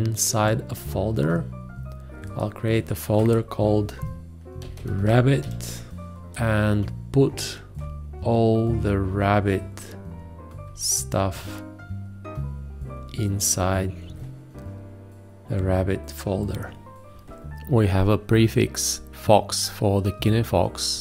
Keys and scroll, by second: 4.0-5.9 typing.